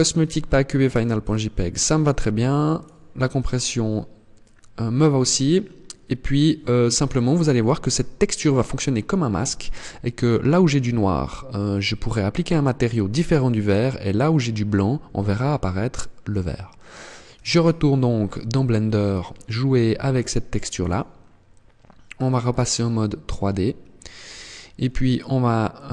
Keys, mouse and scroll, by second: 21.9 click, 22.7-23.5 scroll down 4, 23.5-24.3 scroll up 2, 25.1 click.